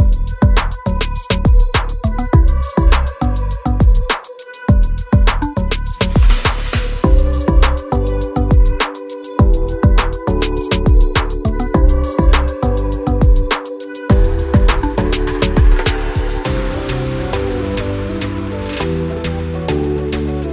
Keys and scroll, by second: 1.0 m, 1.6 space, 2.1 m, 2.5 Up, 3.3 2, 3.5 Return, 3.8 space, 4.3 f, 5.4-7.3 typing, 5.8 Return, 8.5 space, 15.6 l, 17.9-20.5 typing.